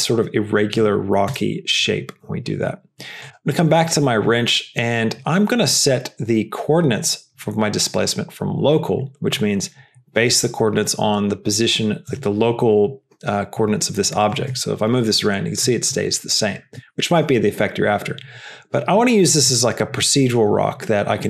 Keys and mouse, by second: 1.4 KP_0, 14.8 g.